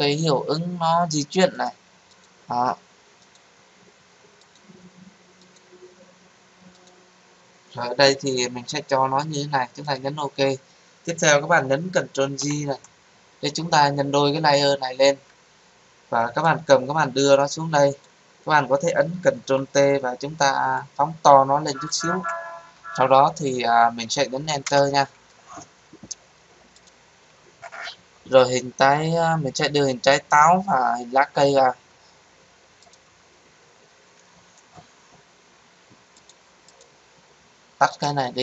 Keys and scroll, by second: 12.4 ctrl+j, 19.3 ctrl+t, 24.6 Return.